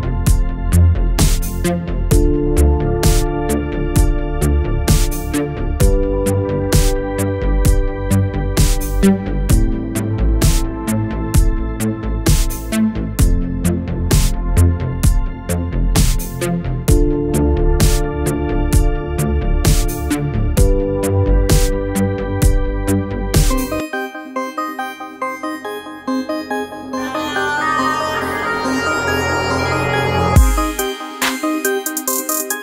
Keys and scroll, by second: 0.2 space, 8.3 BackSpace, 11.3 shift+Right, 13.8 BackSpace, 15.3 shift+Left, 15.8 alt+shift+Left, 16.6 alt+shift+space, 17.0 alt+shift+space, 17.9 alt+shift+space, 18.4 alt+shift+space, 24.8 shift+Up, 25.3 Up, 26.6 Down, 27.3 Up, 27.7 Up, 30.6 ctrl+c, 30.8 f, 31.4 Down, 31.7 Down.